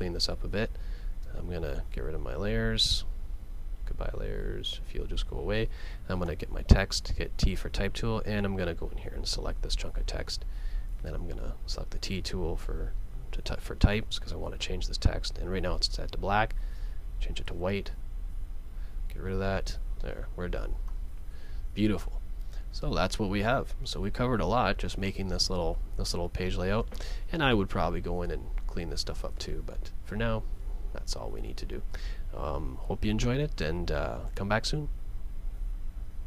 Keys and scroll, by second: 20.9 super+s.